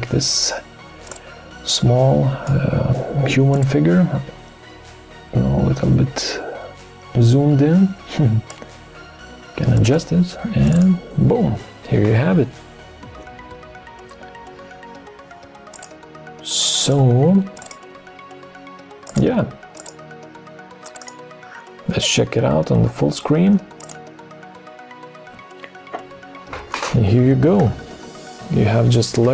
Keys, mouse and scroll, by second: 1.1 shift+click, 27.5 Left, 29.0 Left.